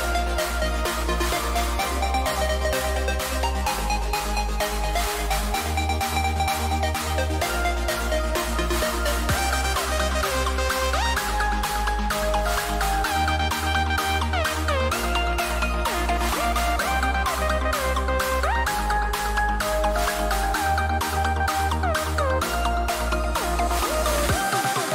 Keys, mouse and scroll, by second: 6.3 a, 6.6 a, 7.7-10.7 middle drag, 12.5-18.7 middle drag.